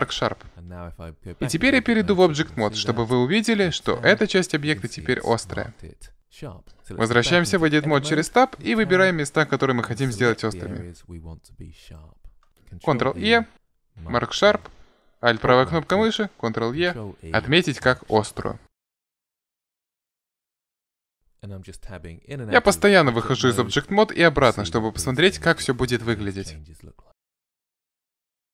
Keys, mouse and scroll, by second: 1.5 Tab, 2.6 middle click, 3.0 middle click, 8.6 Tab, 11.8 right click, 12.4 ctrl+e, 14.8 right click, 16.8 ctrl+e, 18.7 middle click, 19.3 right click, 19.5 ctrl+e, 20.1 Tab, 20.2 middle click, 20.4 Tab, 20.6 right click, 20.8 ctrl+e, 23.0 Tab, 24.0-26.1 middle drag, 27.0 Tab, 27.2 right click, 27.3 ctrl+e, 27.9 Tab, 28.0 middle click, 28.1 Tab, 28.3 right click, 28.4 ctrl+e.